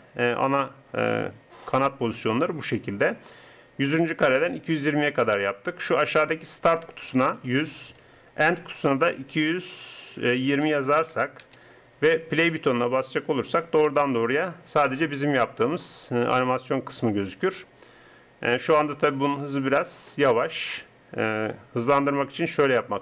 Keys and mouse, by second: 6.3-7.9 drag, 7.9 KP_0, 10.9 KP_2, 21.9-23.0 drag.